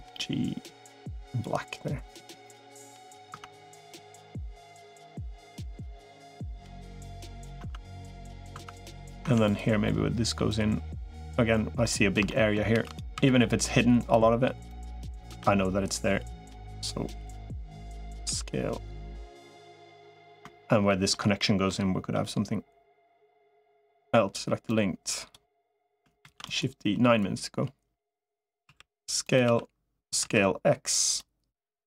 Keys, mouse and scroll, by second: 2.0 click, 2.7 middle click, 3.2 Tab, 3.6 middle click, 5.6-7.3 middle drag, 7.4 Tab, 7.8 middle click, 8.4 Tab, 9.2 Tab, 9.7 middle click, 11.6 middle click, 12.1 shift+middle click, 12.6 shift+d, 13.0 s, 14.6 click, 15.2 e, 18.2 s, 19.7 middle click, 20.7 middle click, 21.5 middle click, 23.4 click, 23.8 l, 24.6 click, 26.0 shift+d, 27.0-28.4 drag, 28.6 s, 29.4 s, 31.6 click.